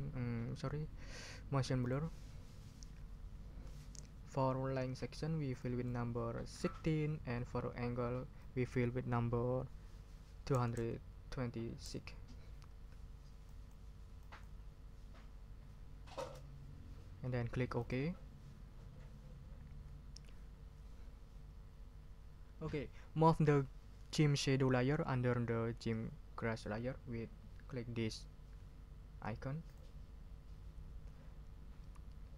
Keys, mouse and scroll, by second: 1.8 click, 5.6 click, 6.6 1, 6.9 6, 8.4 click, 10.5 2, 11.8 6, 13.5 click, 14.2 click, 16.2 Return, 17.8 click, 29.7 click.